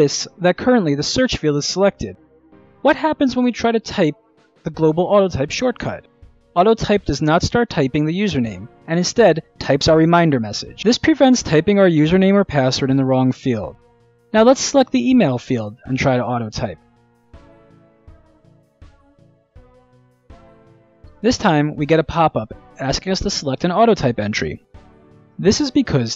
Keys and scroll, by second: 5.7-7.0 typing, 21.0 ctrl+alt+a.